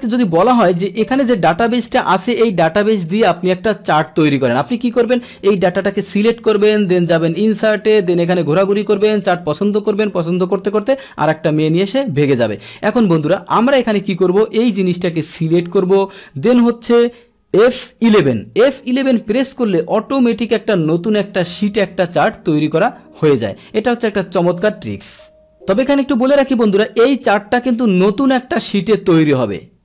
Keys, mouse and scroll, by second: 0.8-3.0 drag, 7.3 click, 8.7 click, 12.6 click, 14.2-15.8 drag, 18.1 F11, 25.5 click.